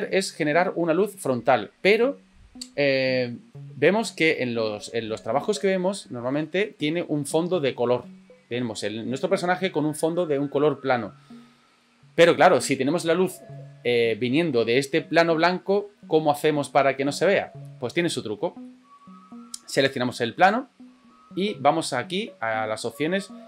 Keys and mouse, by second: 4.1 middle click, 18.6 middle click.